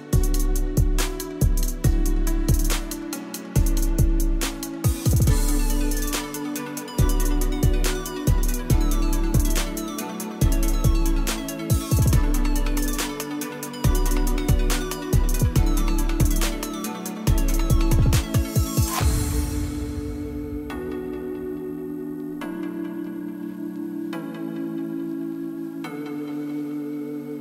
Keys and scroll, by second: 24.2 KP_1, 24.3 KP_0, 24.4 KP_0, 24.6 Return, 25.6 KP_1, 25.8 KP_0, 26.0 Return.